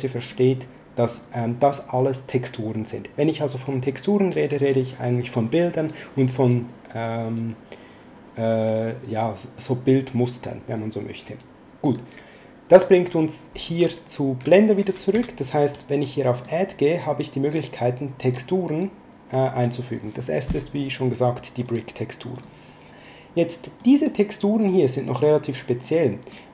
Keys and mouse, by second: 11.8 click, 13.1 click, 15.1 x, 16.3 click, 21.6 click, 23.7 click, 25.7 click.